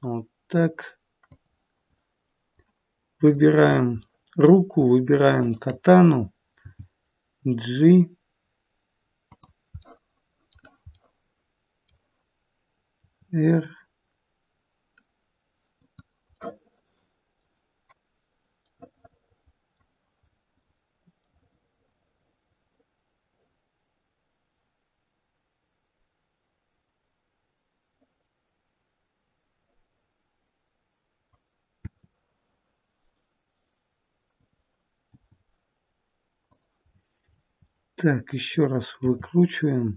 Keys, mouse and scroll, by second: 2.4 middle click, 3.1 click, 3.9 middle click, 5.3 shift+click, 6.6 g, 9.8 middle click, 10.9 middle click, 13.0 r, 16.3 middle click, 18.6 middle click, 20.3-21.0 scroll up 3, 21.2 middle click, 31.7 r, 35.0 g, 36.8-37.5 scroll down 7, 37.5 middle click, 39.0 r.